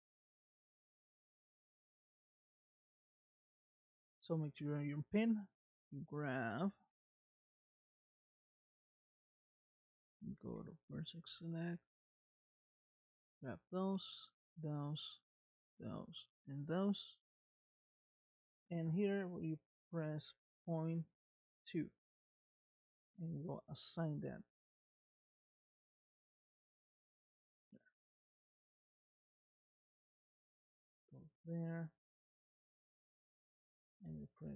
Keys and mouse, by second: 5.8 click, 7.6 Tab, 8.2 click, 11.1 1, 12.4 click, 13.7 shift+click, 15.0 shift+click, 16.1 shift+click, 18.3-23.0 drag, 26.7 Tab, 27.6 middle click, 28.3 space, 30.1 space, 34.1-34.5 drag.